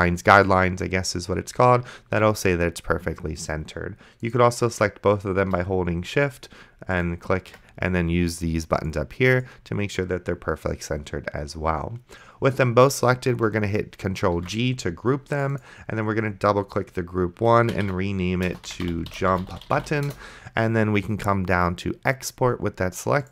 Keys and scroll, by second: 14.6 ctrl+g, 18.1-20.5 typing.